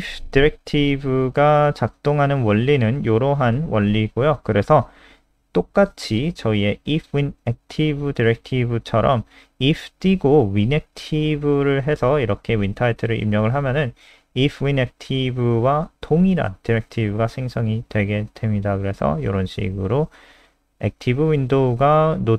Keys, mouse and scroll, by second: 0.6 click, 2.3-3.3 scroll down 1, 4.1 click, 4.9 ctrl+c, 5.0 click, 6.4 ctrl+v, 6.5-7.6 scroll up 4, 7.6 click.